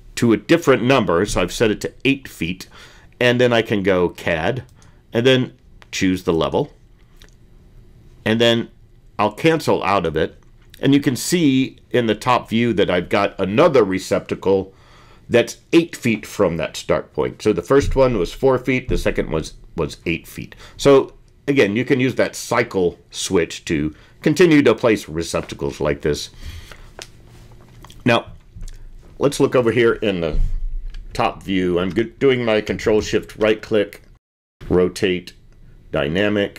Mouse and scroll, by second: 10.3-26.6 drag.